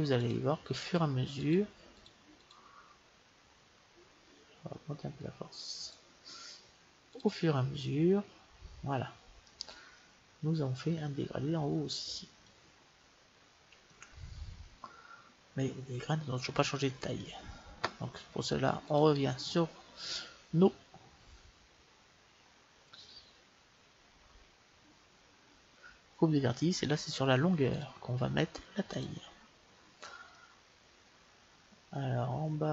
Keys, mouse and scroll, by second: 5.2-6.9 drag, 7.4-9.0 drag, 9.4-11.5 middle drag, 12.7-15.8 middle drag, 18.8-23.2 drag, 23.2-27.7 middle drag, 27.7-29.7 drag, 30.3-32.3 middle drag.